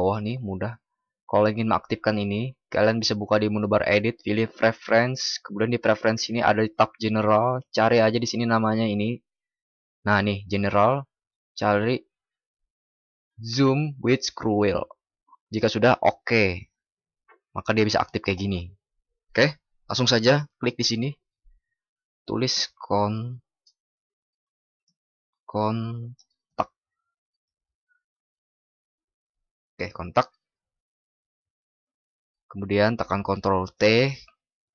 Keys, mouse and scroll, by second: 33.0 ctrl+?.